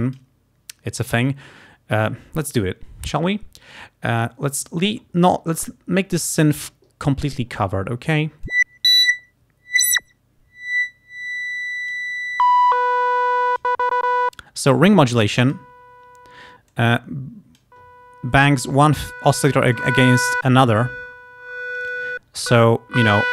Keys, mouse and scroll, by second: 8.5-12.2 drag, 12.5-13.9 drag, 15.3 click, 16.8-17.9 drag, 18.9 click, 19.8 click, 20.6-22.2 drag, 22.6 click.